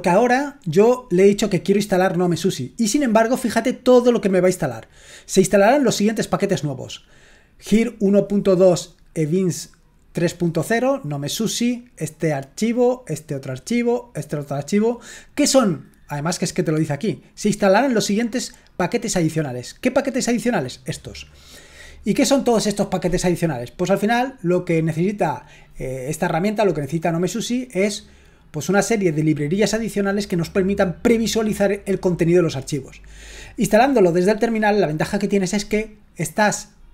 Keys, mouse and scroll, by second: 1.5-3.5 drag, 12.2-15.3 drag, 17.3-19.9 drag, 20.5-22.3 drag.